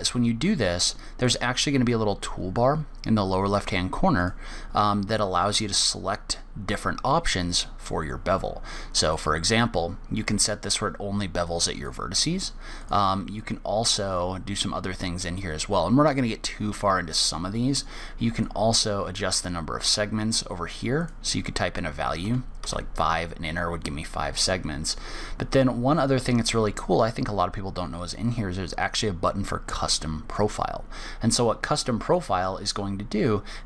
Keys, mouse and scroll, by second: 1.6 click, 4.5 click, 9.4 click, 12.1 click, 13.2 click, 13.7 click, 18.8 click, 21.4 click, 30.6 click.